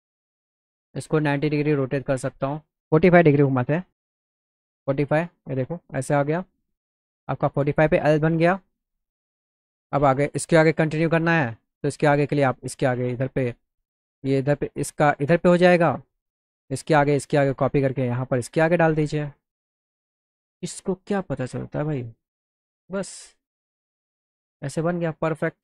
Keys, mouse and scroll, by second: 0.9 click, 1.3 click, 1.8 click, 3.9 click, 6.9 click, 8.5-9.8 drag, 10.4 click, 11.4 click, 12.2 click, 12.7 alt+middle click, 13.6 middle click, 14.6-15.8 drag, 16.7-17.9 shift+drag, 18.9 click, 20.5-22.6 drag, 22.9 click, 24.1 middle click.